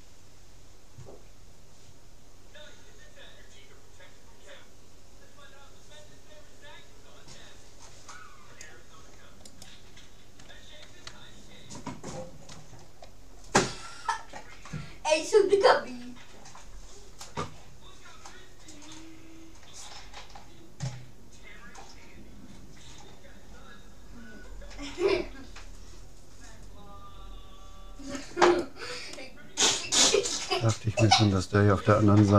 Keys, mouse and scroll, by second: 11.6 middle click, 12.2 scroll up 1, 12.3-14.2 scroll down 2, 12.8 middle click, 14.2-15.2 middle drag, 14.7 c, 28.6-30.2 right drag, 29.2 click, 29.4-30.8 middle drag, 31.8-32.3 middle drag.